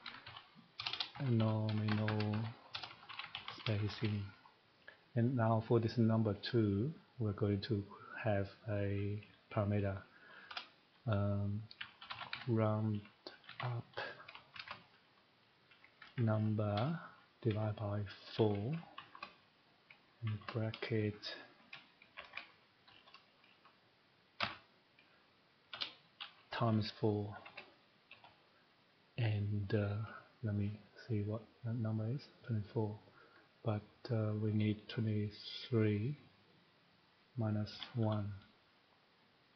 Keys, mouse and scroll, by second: 0.0-4.0 typing, 5.2 click, 6.9 click, 10.2-20.2 typing, 21.5 Home, 22.1 (, 22.8 End, 24.1-25.7 typing, 27.3 *, 28.1 *, 31.9 click, 36.6 click, 37.0 click, 37.7-38.0 typing, 39.1 click.